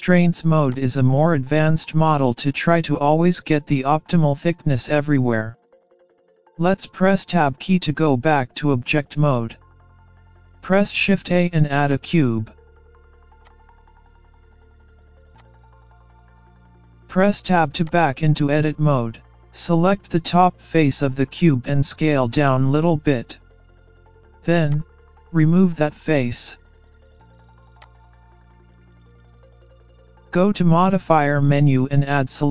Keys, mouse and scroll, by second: 6.7 Tab, 10.1 shift+a, 13.4 click, 14.1-14.4 scroll down 4, 14.5 middle click, 16.0 click, 16.0 scroll up 2, 17.0 Tab, 17.9 click, 19.2 middle click, 22.8 s, 26.6 Delete, 28.6-28.9 scroll up 2, 28.9 middle click, 32.2 click.